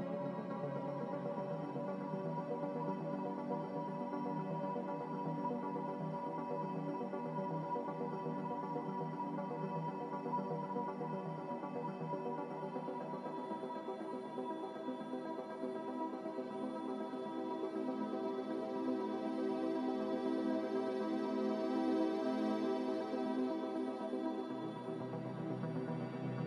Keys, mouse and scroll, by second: 16.1 z, 24.1 s.